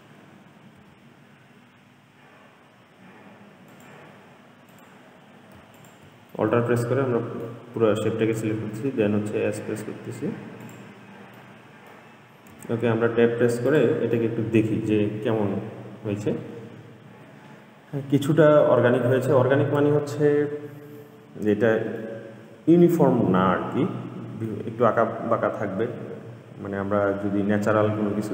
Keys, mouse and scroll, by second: 1.0 s, 4.9 click, 5.9 alt+click, 6.5-8.8 middle drag, 8.8 s, 11.6-12.7 middle drag, 12.7 Tab, 13.8-14.4 drag, 14.4-17.3 middle drag, 21.2-26.1 middle drag.